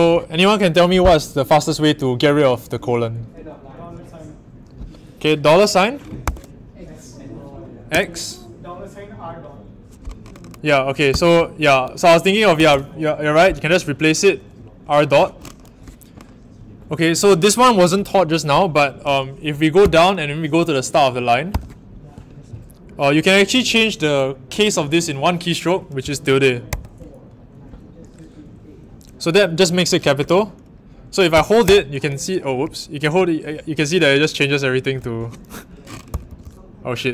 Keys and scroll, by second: 6.2 shift+4, 7.9 x, 11.0 m, 12.5 r, 19.8 i, 21.5 o, 26.6 shift+`, 31.6-35.2 typing, 36.2-37.1 typing.